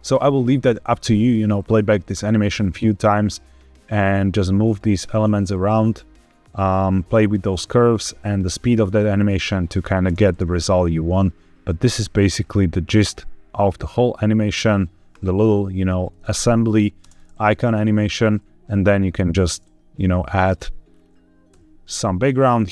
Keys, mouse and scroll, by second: 3.0-9.8 drag, 3.0 scroll down 3, 9.9 space, 16.9 space, 18.9 shift+a, 20.8-21.4 scroll down 2, 21.4 scroll down 1, 21.4 s, 22.1 click.